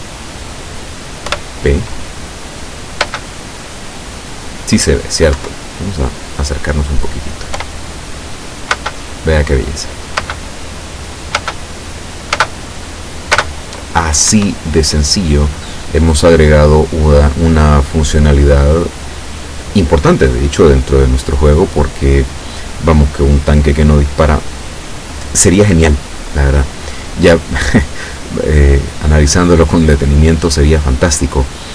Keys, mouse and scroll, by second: 1.3 p, 3.2 space, 5.5 Escape, 7.6 p, 8.8 space, 10.3 space, 11.5 space, 12.5 space, 13.5 space, 14.4 Escape, 15.5-15.9 scroll down 2, 16.1 scroll down 2.